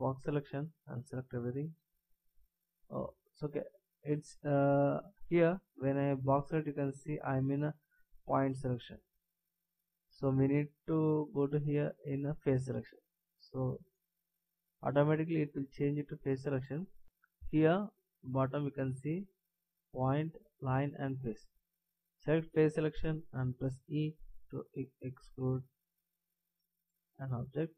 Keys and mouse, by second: 12.7-16.0 drag, 24.1 e.